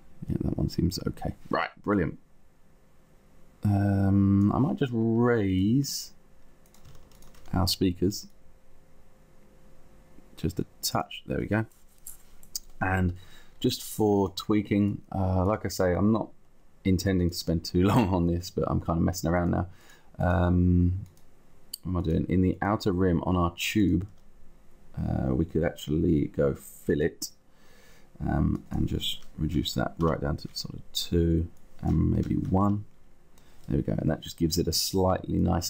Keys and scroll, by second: 29.4 2, 29.9 Return, 32.3 1, 33.0 Return.